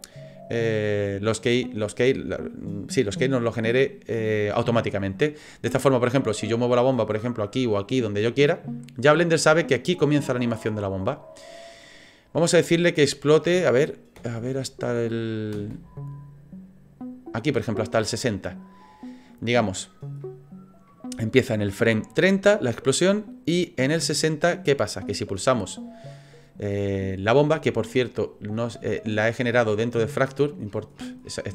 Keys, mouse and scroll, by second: 6.1 click, 7.4 click, 8.5 middle click, 8.8 middle click, 11.9-12.9 scroll up 4, 12.9 click, 14.2 space, 15.5 space, 18.2 click, 20.2 middle click, 20.9 middle click, 21.7 click, 28.5-31.3 scroll down 66.